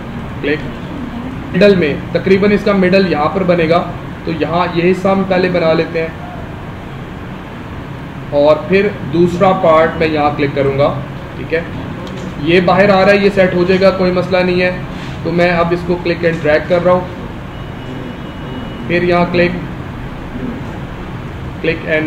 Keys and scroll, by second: 0.7 space, 11.6 space.